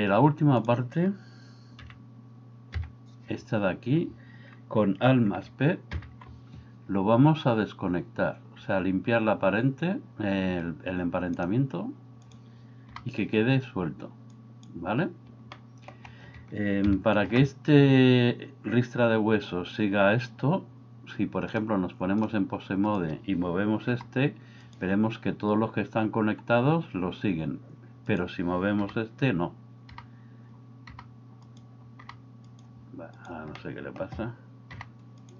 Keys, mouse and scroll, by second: 1.8 KP_1, 2.8 KP_3, 6.2 alt+p, 12.9 g, 15.5 middle click, 16.8 KP_3, 21.6 click, 24.0 g, 28.9 g, 29.9 g, 30.9 g, 32.1 g, 33.7 middle click, 34.8 g.